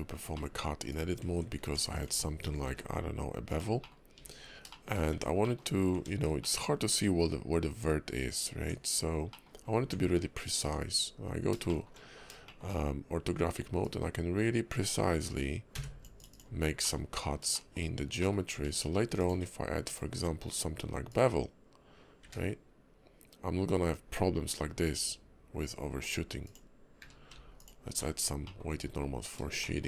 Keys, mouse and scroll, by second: 0.3 middle click, 0.9 click, 1.6 Tab, 1.9 click, 2.6 ctrl+b, 3.8 middle click, 4.1 Tab, 4.7 shift+middle click, 5.1 Tab, 5.4 middle click, 5.7 scroll up 2, 5.9 Tab, 6.4 middle click, 8.5 Tab, 9.0 scroll up 2, 9.3 middle click, 9.6 scroll down 1, 9.8 Tab, 10.2-10.6 scroll down 2, 10.6 `, 11.1 KP_5, 11.7 shift+middle click, 12.0 scroll up 2, 12.5 shift+middle click, 13.8 click, 16.3 click, 16.8 middle click, 17.5 shift+middle click, 18.0 scroll down 1, 18.2 middle click, 18.5 Tab, 19.2 click, 20.2 q, 27.0 q, 28.0-28.4 alt+scroll down 3, 28.4 middle click, 28.8 KP_5, 29.2 scroll up 2, 29.6 shift+middle click.